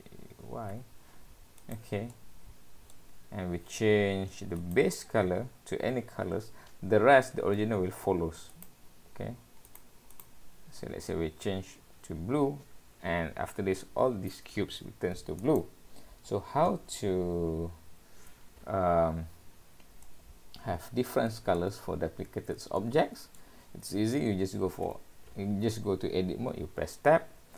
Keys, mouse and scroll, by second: 2.1 middle click, 4.6 click, 8.5 click, 9.7 click, 10.2 click, 16.9-17.8 scroll up 3, 20.1 middle click, 22.8 shift+middle click, 24.9 Tab.